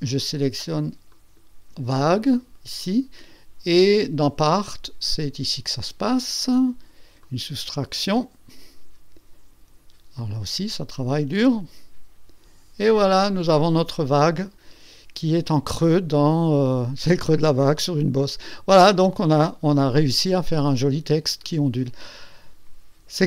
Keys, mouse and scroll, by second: 1.1 ctrl+click, 7.2 click, 13.2-15.5 drag, 15.8-21.6 drag.